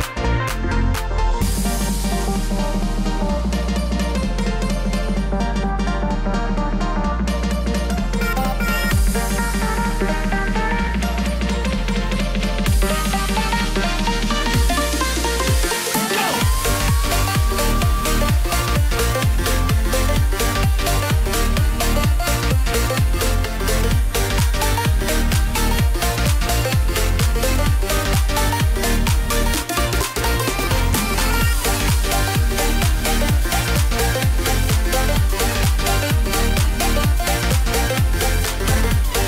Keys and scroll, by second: 13.1 ctrl+z.